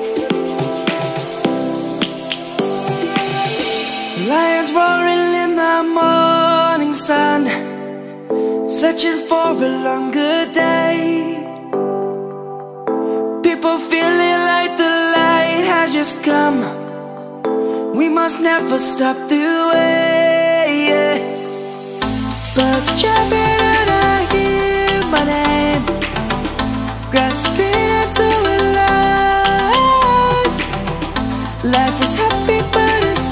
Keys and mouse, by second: 2.7 click, 3.3 Tab, 4.6 click, 5.0 Tab, 7.2 shift+click, 7.8 shift+click, 8.2 shift+click, 9.0 Tab, 10.1 click, 11.0 shift+click, 11.4 shift+click, 11.8 shift+click, 13.0 i, 15.6 click, 18.1 right click, 18.6 middle click, 23.4 1, 24.8 shift+middle click, 27.0 shift+middle click, 29.7 right click, 31.7 click, 33.2 e.